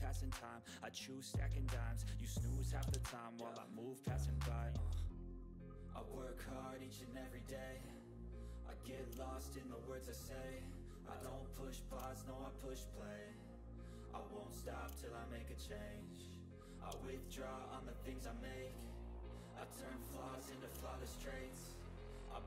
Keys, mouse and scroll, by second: 0.1 click, 0.1 typing, 1.9 click, 2.9 ctrl+a, 4.0 click, 6.6 click, 7.8 click, 7.8 click, 8.8 click, 10.2 click, 10.3 click, 13.6 typing, 13.9 click, 13.9 click, 16.9 ctrl+scroll up 1, 17.3 ctrl+middle click, 17.5 ctrl+scroll down 1, 18.8-21.0 drag.